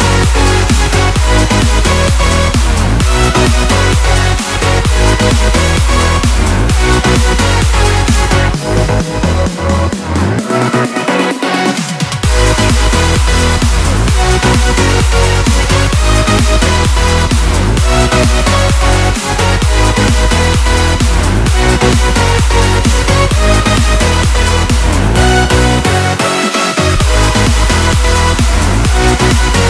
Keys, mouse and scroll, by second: 0.0-1.0 typing, 0.9 alt+scroll down 1, 3.3 click, 7.0 ctrl+a, 7.4 ctrl+c, 7.8 click, 9.1-10.0 scroll down 2, 10.0 click, 10.5 ctrl+v, 12.0 click, 13.6-14.4 scroll down 1, 14.4 click, 18.4 click, 20.3 ctrl+a, 21.2 ctrl+c, 21.7 click, 22.2 scroll up 1, 22.4 click, 23.0 ctrl+v, 23.7-26.2 drag, 27.8 click.